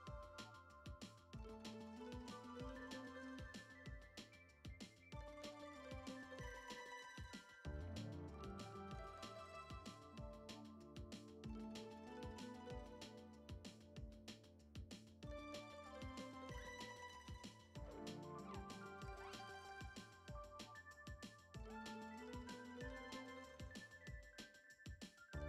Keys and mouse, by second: 2.5 n, 2.7 F6, 3.5 drag, 5.7 click, 8.0 click, 10.9 click, 13.0 n, 13.3 F6, 14.1 a, 14.5 middle click, 15.1 u, 16.0 middle click, 16.9 a, 18.0 ctrl+Tab, 18.9 click, 19.1 Tab, 19.7 a, 20.5 u, 21.8 ctrl+Tab, 22.1 click, 22.6 Tab, 22.9 a, 23.2 u, 24.3 a, 24.5 r.